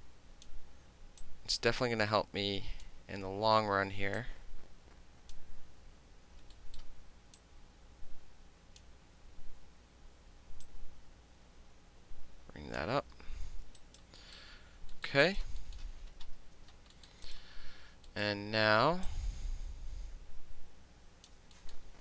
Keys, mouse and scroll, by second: 1.2-2.8 drag, 4.2-5.3 drag, 6.4 alt+middle click, 6.8-7.4 alt+middle drag, 7.4-8.8 drag, 8.8-10.6 middle drag, 10.6-12.8 drag, 13.2 f, 13.8 alt+right click, 14.2 alt+middle click, 14.9 alt+middle click, 15.2 alt+right click, 15.6-16.9 alt+middle drag, 17.1-18.1 alt+middle drag, 17.3 alt+right click, 18.2-19.1 alt+middle drag, 19.1-21.3 alt+drag, 21.3 alt+middle drag, 21.7-22.0 alt+middle drag.